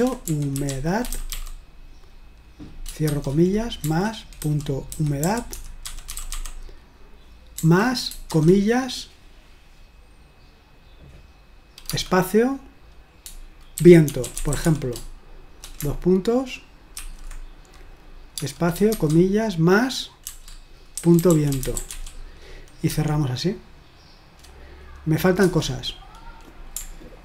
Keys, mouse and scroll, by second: 0.0-1.8 typing, 3.1-8.3 typing, 11.9 space, 13.6-15.1 typing, 17.0 typing, 18.4-18.9 typing, 20.8-22.9 typing, 25.4 Return.